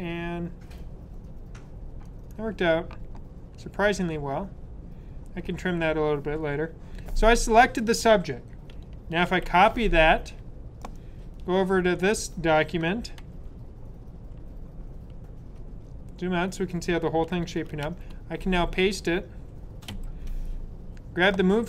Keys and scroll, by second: 9.1 super+c, 13.1 super+-, 14.2 super+-, 17.8 super+-, 17.8 super+v, 19.8 super+v.